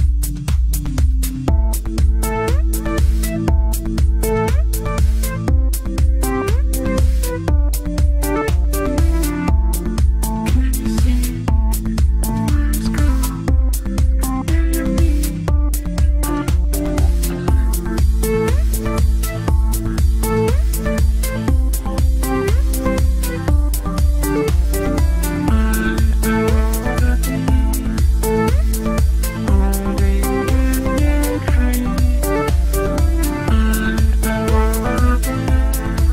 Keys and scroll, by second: 2.0 ctrl+z, 2.6 ctrl+q, 15.2 c, 27.3 ctrl+z.